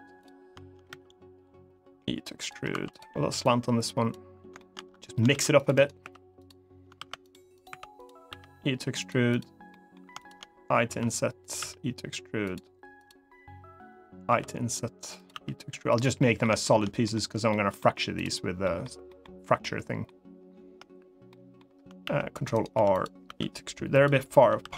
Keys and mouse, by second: 0.6 e, 2.1 click, 2.4 2, 2.6 click, 3.2 click, 4.3 middle click, 5.0 ctrl+r, 5.5 right click, 5.7 3, 6.2 click, 6.7 ctrl+r, 7.3 click, 7.4 3, 7.7 click, 8.0 e, 8.7 click, 9.1 click, 9.5 middle click, 10.0 shift+click, 10.6 i, 11.1 click, 12.2 click, 12.2 e, 12.7 click, 14.0 i, 14.9 click, 15.6 click, 15.6 e, 15.9 middle click, 16.4 shift+middle click, 16.8 middle click, 17.2 middle click, 18.4 middle click, 18.8 middle click, 19.4 middle click, 21.0 middle click, 21.7 ctrl+r, 22.2 right click, 22.5 3, 22.7 click, 23.0 e, 23.6 click, 24.4 ctrl+r.